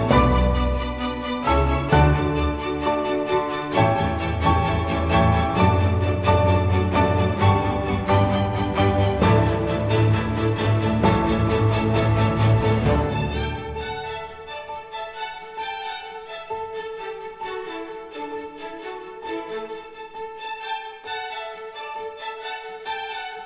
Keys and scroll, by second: 0.9 super+t, 6.3 super+s.